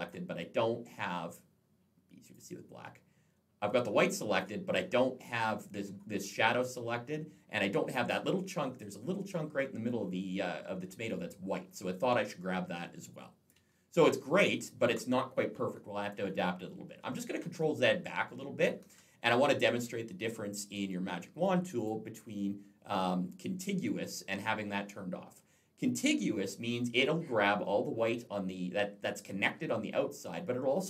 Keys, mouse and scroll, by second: 2.1 click, 2.6 click, 6.6-7.4 scroll up 2, 7.4 click, 13.5-14.4 alt+scroll down 1, 14.4 alt+scroll up 1, 16.8 ctrl+z, 21.6 click.